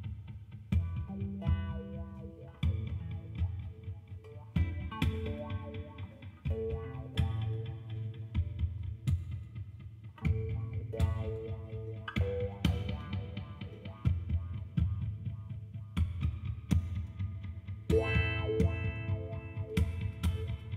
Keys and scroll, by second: 18.4 ctrl+alt+0, 20.4 g.